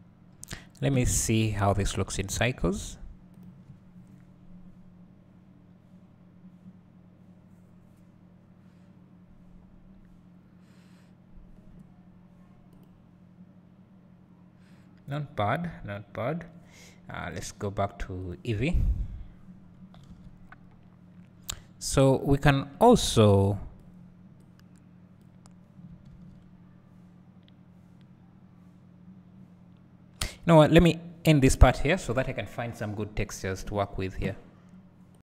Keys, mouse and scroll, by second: 0.3-1.4 scroll down 2, 1.4-4.6 scroll down 1, 4.6 click, 22.1-35.3 drag, 22.1-24.9 scroll down 2, 27.3 s.